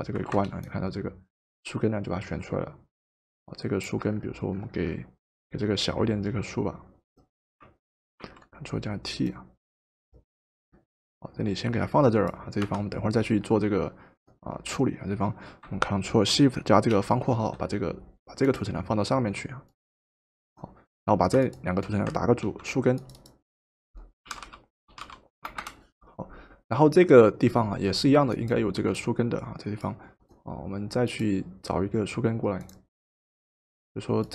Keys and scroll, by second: 0.3 v, 8.2 ctrl+t, 12.6 Return, 22.4 ctrl+g, 24.0-25.5 typing, 25.6 Return.